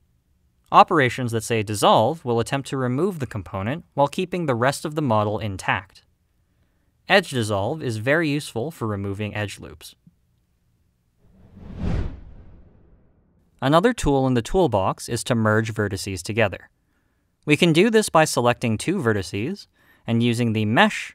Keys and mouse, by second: 1.5 click, 2.6 click, 4.7 x, 7.2 middle click, 9.1 click, 9.7 x, 16.9 click, 20.4 middle click.